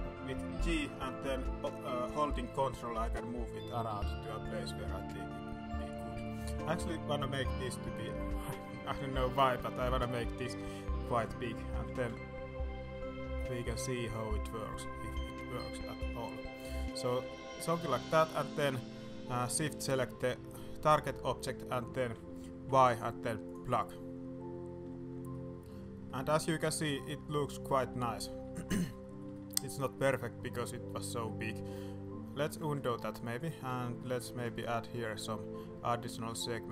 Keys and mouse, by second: 0.7 g, 6.6 s, 11.8 g, 17.2-17.6 middle drag, 17.8 middle click, 18.0 middle click, 19.5 shift+click, 20.0 middle click, 20.2 middle click, 20.5-21.0 middle drag, 22.6 y, 25.3-25.6 middle drag, 26.0-26.6 middle drag, 26.8-28.2 middle drag, 28.4 shift+middle drag, 28.9 middle drag, 29.1 middle click, 29.3 shift+middle drag, 29.9 middle drag, 30.4-31.0 middle drag, 31.2-31.5 middle drag, 31.6 middle drag, 32.4 ctrl+z, 33.3 click, 33.6 Tab, 33.9 click, 34.3 ctrl+r.